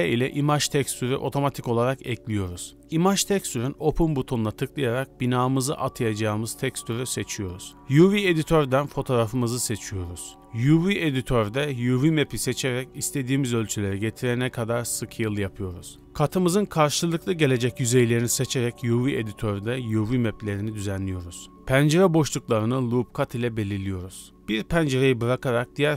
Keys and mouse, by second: 0.3 ctrl+t, 2.1 b, 2.9 x, 3.8-4.4 drag, 7.9 click, 10.0 s, 10.8 g, 12.1 click, 12.6 click, 12.8 g, 14.0 click, 16.0 3, 17.1 a, 17.7 shift+middle click, 18.6 s, 21.0 middle click, 21.5 ctrl+r, 22.2 ctrl+r, 24.3 alt+e.